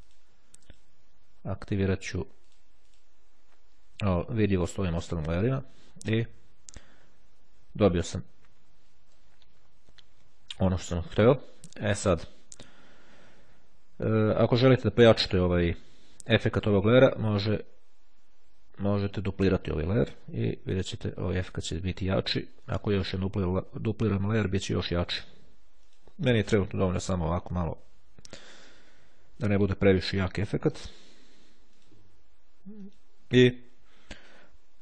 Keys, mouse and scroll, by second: 0.1 click, 1.0 click, 2.0 click, 3.0 click, 6.5-6.9 ctrl+scroll up 2, 7.4-7.9 ctrl+scroll up 2, 11.8-12.5 scroll down 2, 12.5-12.9 scroll up 2, 15.9-16.7 ctrl+scroll down 2, 19.0 click, 22.8 click, 26.0 click, 31.9 click, 32.5 click.